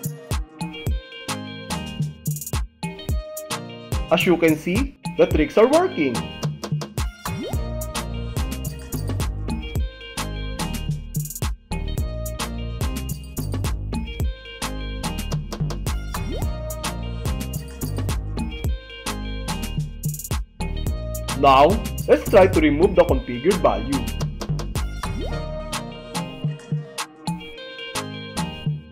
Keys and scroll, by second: 2.3 space, 7.4 space, 13.6 Return, 25.2 shift+f, 27.2 s.